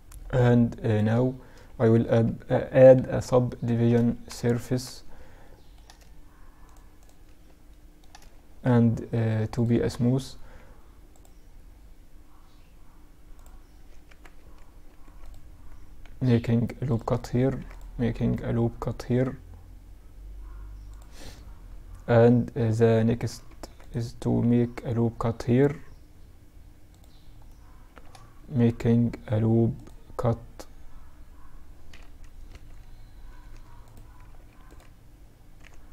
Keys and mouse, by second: 1.3 ctrl+2, 2.4-2.8 drag, 3.3 KP_Add, 3.6 KP_Add, 5.7-7.7 middle drag, 7.7-10.2 drag, 7.7 t, 8.8 t, 12.9 Tab, 13.8 ctrl+r, 16.5 ctrl+r, 22.5 ctrl+r, 26.5-29.9 middle drag, 27.5 ctrl+r, 33.5 ctrl+r.